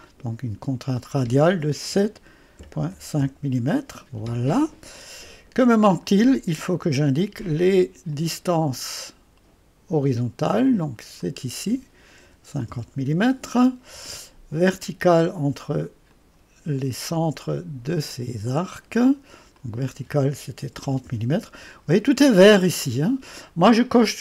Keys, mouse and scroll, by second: 0.0 click, 1.9-2.9 typing, 3.2 Return, 5.3 typing, 8.1 click, 10.1 click, 11.2 click, 12.0-13.0 typing, 16.1 click, 18.0 click, 19.6 click, 20.4-21.3 typing.